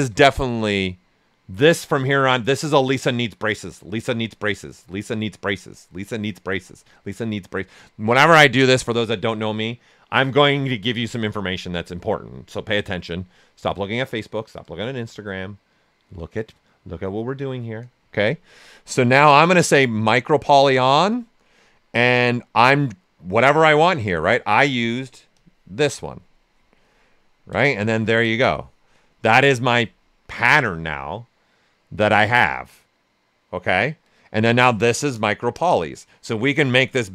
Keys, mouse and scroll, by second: 20.4 click, 25.3 click, 26.2 right click, 26.7 ctrl+right click, 36.5 click.